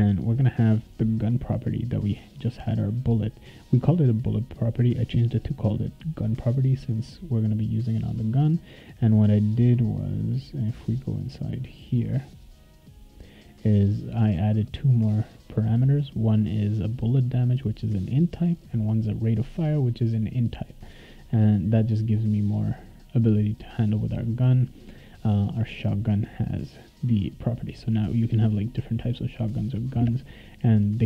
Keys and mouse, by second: 1.3 click, 2.9 click, 8.2 click, 8.5 right click, 11.7 click, 13.7 click, 13.9 click, 16.7 click, 16.9 click, 17.8 click, 18.0 click, 18.8 click, 19.0 click, 19.7 click, 19.9 click, 20.6 click, 21.2 click, 22.0 click, 25.4 click.